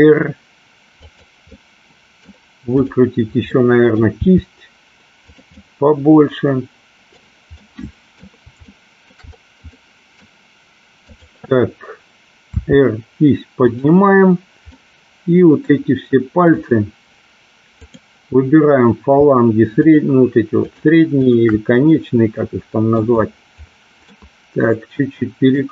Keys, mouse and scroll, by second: 1.1 click, 1.5-2.3 middle drag, 3.5-4.0 middle drag, 4.1 r, 5.4 click, 5.7-7.2 middle drag, 7.8 middle click, 8.8-9.2 shift+middle drag, 9.9 middle click, 11.2 click, 12.5 r, 13.8 click, 14.8 middle click, 17.8 click, 20.7 shift+click, 21.3 shift+click, 22.0-23.1 middle drag, 24.0-25.7 middle drag.